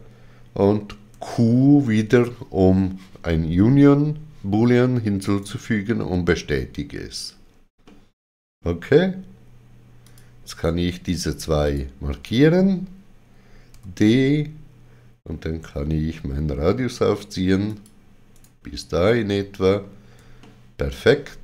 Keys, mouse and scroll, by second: 1.1 q, 5.2 right click, 7.9 middle click, 10.0 click, 11.7 shift+click, 13.7 d, 17.7 shift+click, 17.7 d, 18.4 right click, 19.2 middle click, 20.4 shift+middle click.